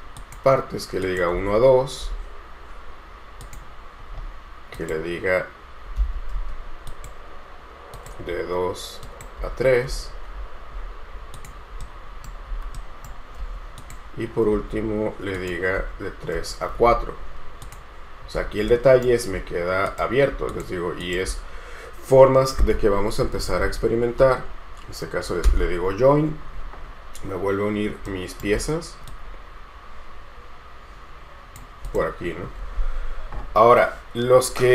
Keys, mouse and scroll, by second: 1.5 space, 4.4-5.7 scroll up 1, 6.2 Escape, 6.5 space, 9.6 space, 10.0 space, 10.5-12.0 scroll down 1, 12.0 right click, 13.6 space, 14.7 space, 17.0-17.7 scroll down 1, 18.9 right click, 19.5-20.4 scroll up 1, 20.7 shift+click, 23.2-24.4 typing, 25.6 Return, 27.4-28.2 scroll up 1, 28.2 scroll up 1, 28.3 shift+right click, 33.1-33.7 scroll down 1.